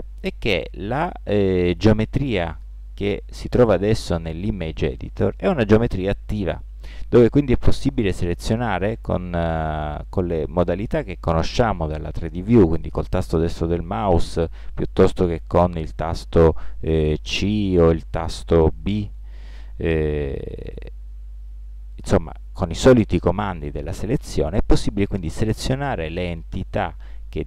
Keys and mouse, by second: 6.1-7.7 right drag, 8.0-9.8 right drag, 15.6 c, 20.1 b.